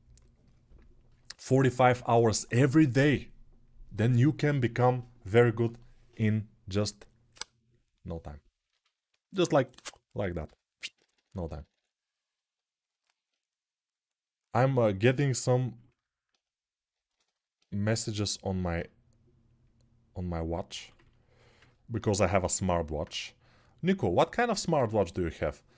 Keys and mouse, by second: 10.2-11.5 typing, 12.1-25.7 drag, 21.8 1.